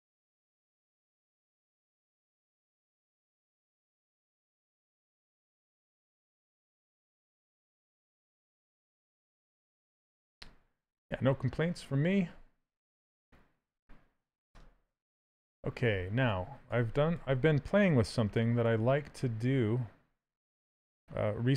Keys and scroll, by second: 3.5 s, 16.4 s, 20.0 s.